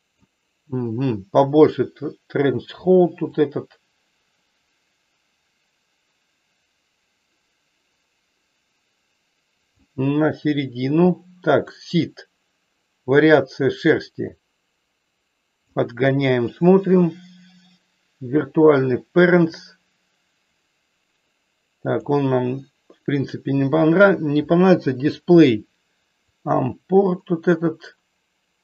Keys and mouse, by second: 3.5-9.8 drag, 11.7-15.7 drag, 19.5-22.0 drag, 26.3-28.6 drag.